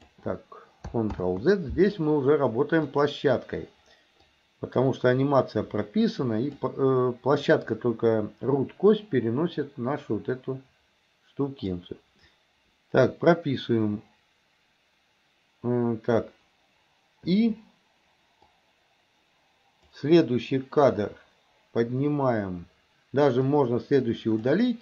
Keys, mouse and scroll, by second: 1.2 ctrl+z, 2.8 click, 4.4-6.7 drag, 7.6-11.8 drag, 18.5-20.0 drag, 23.6 click.